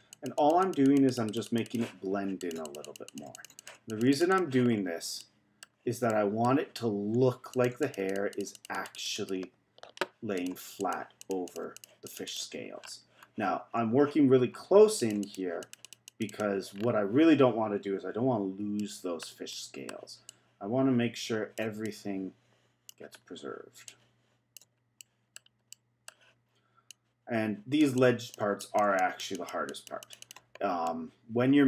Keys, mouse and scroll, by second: 4.7-5.2 scroll down 2, 5.2-6.8 middle drag, 6.8-7.5 scroll up 2, 7.5-10.5 drag, 10.8-12.8 drag, 12.8-13.7 scroll down 4, 13.7-14.5 scroll up 1, 14.5-15.0 scroll up 2, 15.0-16.7 drag, 16.7-17.7 scroll down 3, 17.7-18.3 scroll up 1, 18.3-18.8 scroll up 2, 18.8-20.3 middle drag, 20.3-23.1 drag, 23.1-23.8 scroll down 2, 23.8-25.0 drag, 25.0-26.8 middle drag, 26.8-30.8 drag, 30.8-31.6 middle drag.